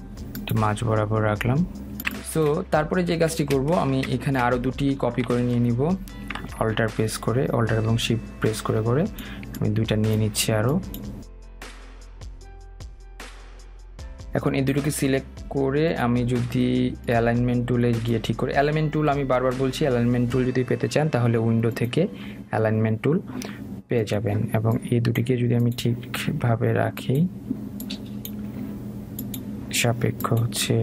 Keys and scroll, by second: 12.3 Delete.